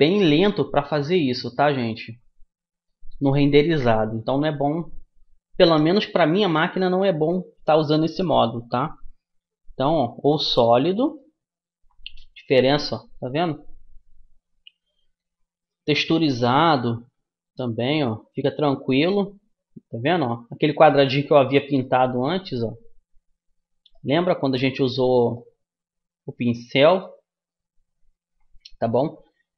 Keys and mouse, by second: 1.7-3.5 middle drag, 4.5-16.7 middle drag, 16.7-18.5 drag, 18.5-21.7 middle drag, 21.7-23.4 right drag, 23.4-29.5 middle drag.